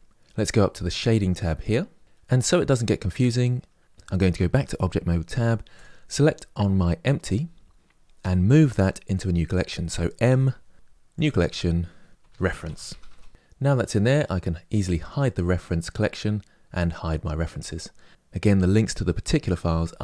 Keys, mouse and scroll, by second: 1.0 click, 4.0 Tab, 5.8 click, 13.1 e, 14.7 click.